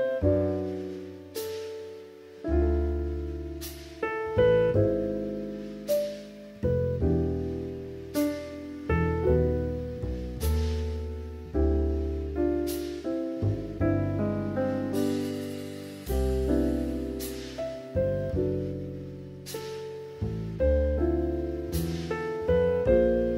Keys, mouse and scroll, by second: 2.3 s, 2.6 z, 6.8 s, 7.0 z, 8.5 s, 8.7 x, 10.1 KP_3, 12.1-14.1 drag, 17.6 r, 18.6 click, 20.7 s, 21.5 z.